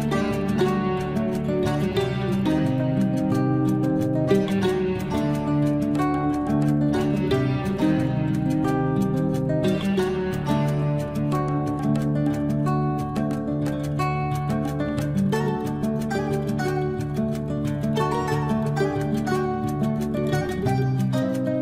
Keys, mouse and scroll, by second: 0.3 shift+middle click, 1.0 shift+scroll up 1, 1.2 shift+space, 2.4 shift+click, 2.8-3.6 scroll up 1, 3.6 shift+click, 5.0 shift+Escape, 5.5 shift+click, 5.9 shift+Escape, 6.9 shift+space, 7.3 click, 9.3 shift+Delete, 11.1 shift+click, 13.9 shift+Escape, 14.5 shift+click, 14.9 space, 15.3 shift+click, 16.4 shift+Delete, 16.7 shift+scroll up 1, 17.0-19.4 shift+middle drag, 19.4 shift+scroll down 1, 20.1 shift+scroll up 1.